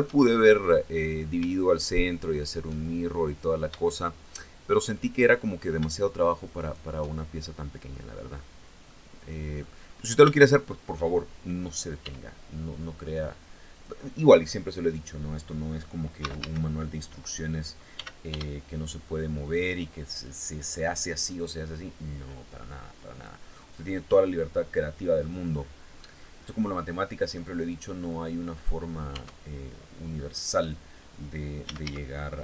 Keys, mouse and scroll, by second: 0.5-0.8 scroll up 1, 1.9 shift+right click, 2.4 shift+middle click, 3.4-5.4 shift+middle drag, 6.1 shift+right click, 6.7 shift+middle click, 7.8 scroll down 1, 8.4 middle click, 9.4 scroll up 2, 9.9 shift+middle click, 11.5 e, 13.3 click, 15.7 a, 17.5 s, 17.9 y, 19.7 click, 21.6-23.0 drag, 23.1-25.7 drag, 25.8-26.1 scroll down 1, 26.1 click, 28.7 Tab, 31.0-31.9 typing.